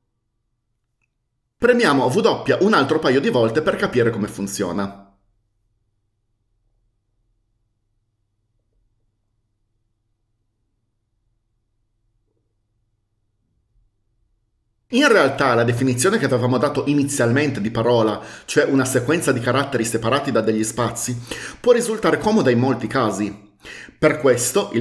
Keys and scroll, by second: 4.9 w, 6.8 typing, 8.5 typing, 10.3 typing.